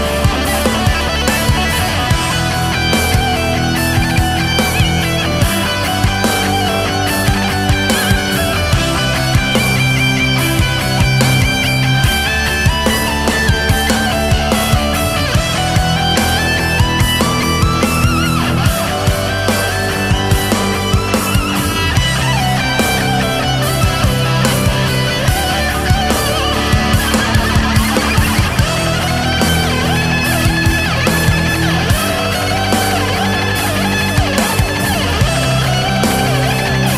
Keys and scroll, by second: 1.4 space, 4.3 ctrl+z, 4.7 ctrl+z, 5.4 ctrl+z, 6.3 ctrl+z, 6.5 ctrl+z, 6.9 ctrl+z, 7.7 ctrl+z, 8.0 space, 8.9 space, 10.3 space, 12.4 ctrl+z, 12.7 ctrl+z, 13.0 ctrl+z, 13.6 ctrl+z, 15.2 ctrl+z, 17.6 ctrl+z, 18.0 ctrl+z, 18.8 ctrl+z, 19.5 ctrl+z, 20.7 ctrl+z, 20.9 ctrl+z, 22.8 ctrl+z, 25.5 space, 26.4 space, 30.3 ctrl+z, 31.0 ctrl+z, 31.3 KP_6, 33.3 KP_4, 33.5 ctrl+z, 33.9 space, 35.9 ctrl+z.